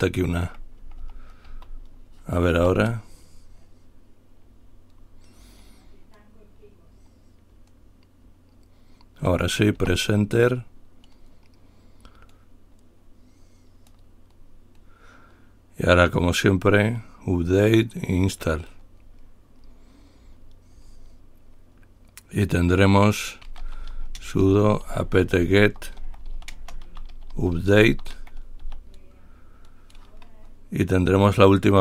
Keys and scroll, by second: 0.2-1.1 Left, 1.3 Left, 1.7 a, 2.8 Return, 5.3 typing, 10.1 Return, 23.8-28.9 typing, 30.7-31.4 typing.